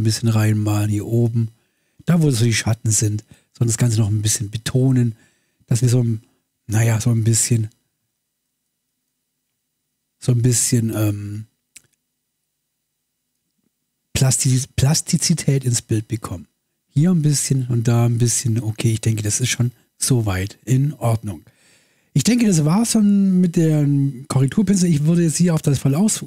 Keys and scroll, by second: 8.0 space.